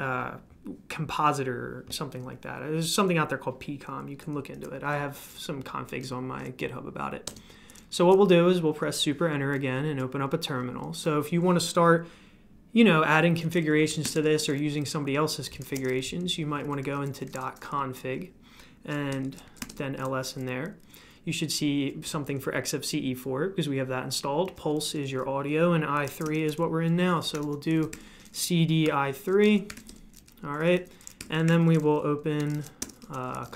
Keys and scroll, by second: 7.2 super+Return, 13.6-17.9 typing, 19.1-20.2 typing, 25.7-33.5 typing, 29.0 Tab.